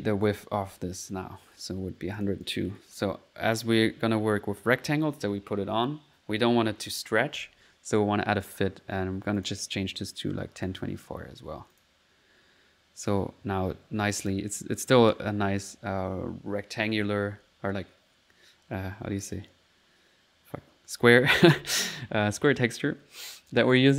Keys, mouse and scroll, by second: 0.3 click, 1.0 middle click, 1.0 typing, 2.2 click, 2.5 click, 2.9 middle click, 3.6 click, 7.4 typing, 8.5 click, 9.4 click, 9.7 click, 10.6 click, 11.7 click, 12.3 middle click, 12.3 typing, 14.2 click, 15.0 middle click, 16.1 typing, 23.5 click.